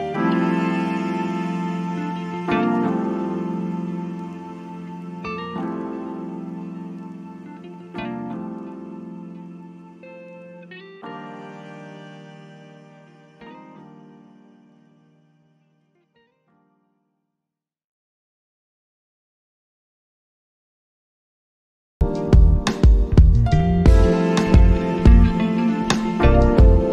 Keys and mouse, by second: 4.5 click, 8.1-9.7 drag, 9.7 right click, 12.5-17.0 drag, 21.5 right click, 23.2-26.9 drag.